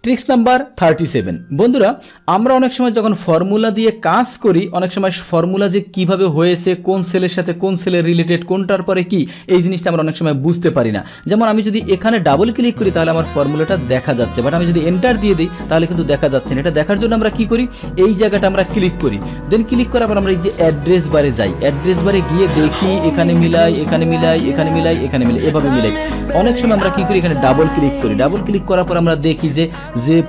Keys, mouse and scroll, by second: 0.0 alt+Tab, 2.9 click, 3.2 click, 11.3 Return, 12.2 click, 12.4 click, 14.8 Return, 18.2 click, 19.2 click, 27.4 click, 27.6 click.